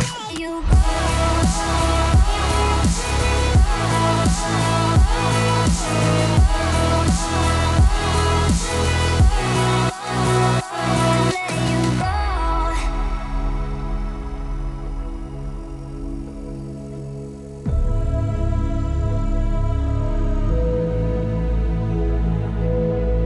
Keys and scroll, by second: 0.2 s.